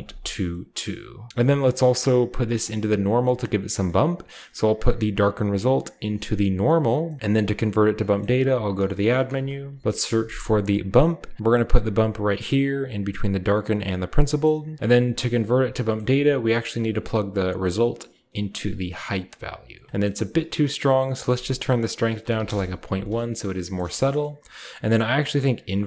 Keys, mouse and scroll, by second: 1.1 scroll down 1, 1.5 middle click, 2.4-2.9 middle drag, 2.9 click, 3.6-5.3 scroll up 1, 5.3-6.4 drag, 6.8 click, 7.9 shift+middle click, 8.1 typing, 8.9 click, 9.2-11.1 typing, 11.1 click, 12.5 click, 13.3 click, 17.1 click, 18.1-18.8 drag, 19.9-20.9 scroll up 1, 20.9-22.0 drag, 20.9 scroll up 1, 22.0-22.7 typing, 23.5-25.4 shift+middle drag, 25.4-25.8 drag.